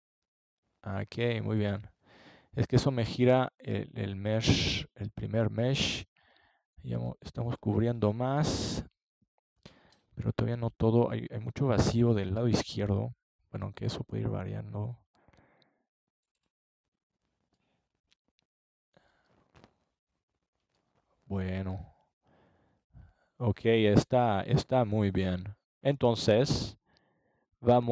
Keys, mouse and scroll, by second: 2.3-5.8 middle drag, 10.8-12.4 drag, 13.4 click, 13.6 middle click, 16.0 ctrl+j, 18.4-21.6 drag, 27.1 ctrl+s.